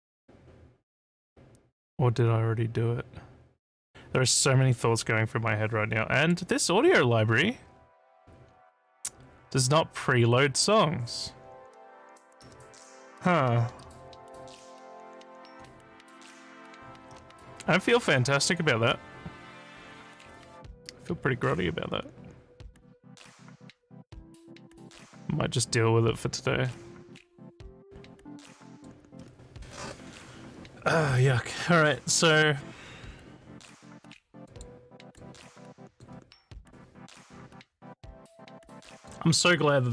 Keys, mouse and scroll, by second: 6.2 click, 28.7 click, 34.4 click, 35.0 click, 35.9 click, 38.9 click.